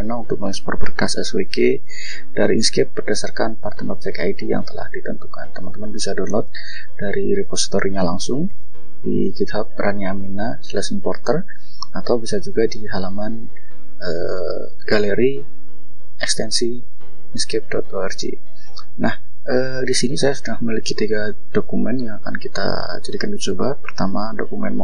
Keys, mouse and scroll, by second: 2.9 click, 4.1 click, 5.3 click, 8.1-8.4 scroll up 2, 12.2 click, 16.8-18.7 scroll up 2, 18.7 click, 20.4 click, 22.7 click, 23.8-24.1 scroll down 2, 24.3-24.6 scroll up 2, 24.7 scroll down 2.